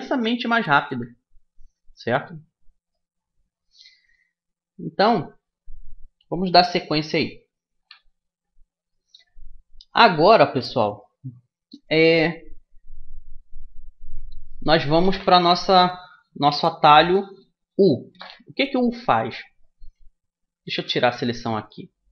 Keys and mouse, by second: 0.1 Tab, 0.6 Tab, 1.3 Tab, 2.6-4.7 middle drag, 19.3-21.1 middle drag, 20.4 a.